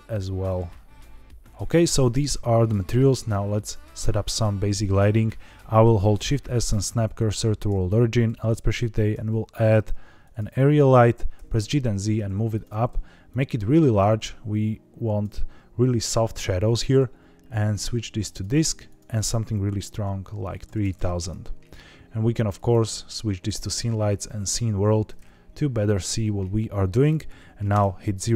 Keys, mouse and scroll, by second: 0.4 click, 3.9-5.2 scroll down 2, 6.1 shift+s, 8.2 shift+a, 11.5 g, 11.5 z, 12.5 click, 17.5-18.3 drag, 18.8-21.1 drag, 20.7 KP_0, 20.9 KP_0, 22.5-25.6 drag, 27.6 KP_0.